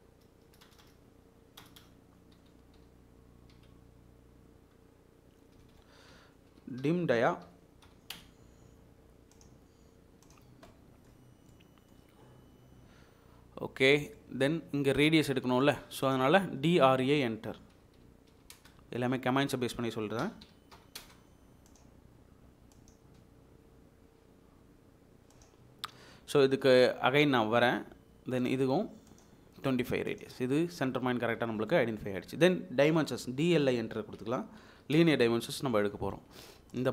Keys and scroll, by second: 0.6 BackSpace, 0.8 BackSpace, 2.7-3.5 typing, 5.6 Escape, 6.1 Escape, 6.5-7.8 typing, 8.1 Return, 17.0 Escape, 17.9-18.3 typing, 20.4-21.1 typing, 27.6 space, 33.2 Escape, 33.2 `, 33.8 Escape, 34.6-35.0 typing.